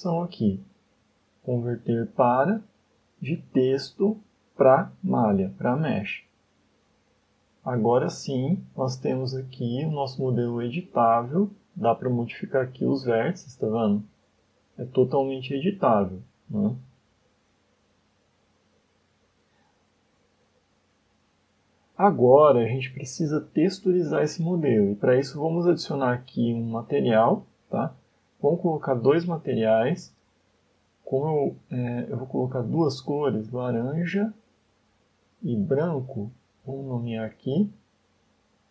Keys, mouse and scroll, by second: 7.0 scroll up 2, 7.4 Tab, 7.7 middle click, 9.6 click, 10.1 scroll up 4, 11.1 right click, 11.4 scroll up 1, 11.8 shift+middle click, 12.4 middle click, 13.9 g, 15.9 right click, 16.3 g, 17.0 right click, 18.0 ctrl+z, 18.3 ctrl+z, 19.6-20.0 scroll down 5, 20.2 middle click, 21.7 scroll down 2, 22.1 shift+middle click, 22.7 middle click, 23.1 Tab, 23.7 middle click, 25.9 click, 28.9 click, 30.1 click, 30.9 click, 32.3 click, 32.4 click, 35.3 click, 35.5 click, 38.6 click.